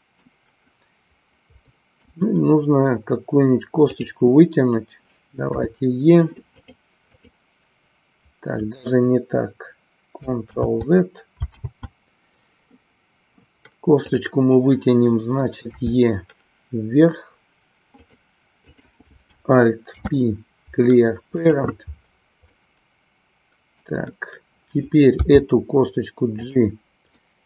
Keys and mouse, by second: 1.7 middle click, 6.6 click, 18.7 click, 22.6-24.0 middle drag, 26.5 click, 27.2-27.4 middle drag.